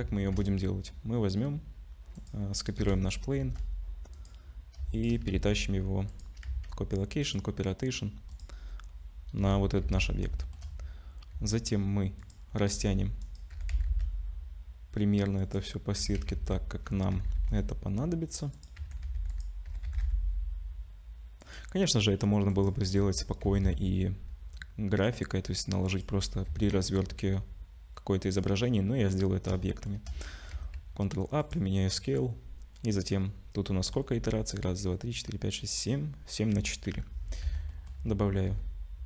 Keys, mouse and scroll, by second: 0.2 shift+a, 2.2 click, 2.8 KP_0, 3.4 shift+d, 4.5-5.0 scroll up 2, 5.0 shift+click, 5.3 ctrl+c, 6.5 ctrl+c, 7.7 middle click, 8.3 click, 8.6-9.4 scroll down 2, 9.4 scroll down 1, 9.4 KP_0, 9.8 z, 10.4 shift+middle click, 10.6-11.0 scroll up 3, 11.3 s, 12.7 g, 13.6 g, 18.8 Tab, 18.8 g, 21.4 click, 21.4 2, 22.5 click, 26.5 Tab, 29.7 shift+middle click, 30.9 ctrl+a, 36.9 /, 37.4 Tab, 37.7 middle click, 38.4 ctrl+r.